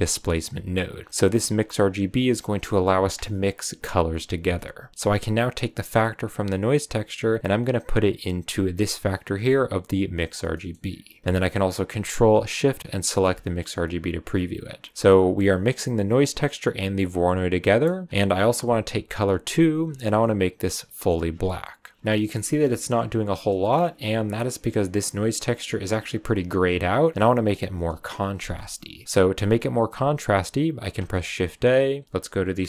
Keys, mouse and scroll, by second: 0.0 click, 0.9 scroll up 2, 1.1 click, 4.9 click, 6.3 click, 10.5-10.9 middle drag, 10.9 scroll up 2, 12.8 ctrl+shift+click, 14.8 scroll down 1, 14.9-15.7 middle drag, 15.7 click, 16.6 click, 17.1 click, 17.6 middle click, 17.8-19.4 scroll up 3, 19.4 click, 22.0-22.6 scroll up 2, 22.6-24.2 shift+middle drag, 24.2 click, 26.3 click, 28.9 scroll down 1, 30.9 shift+a.